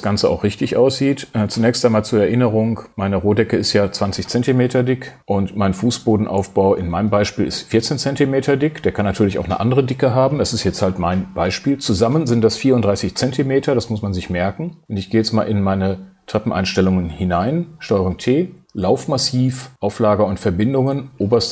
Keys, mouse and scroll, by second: 6.1 shift+space.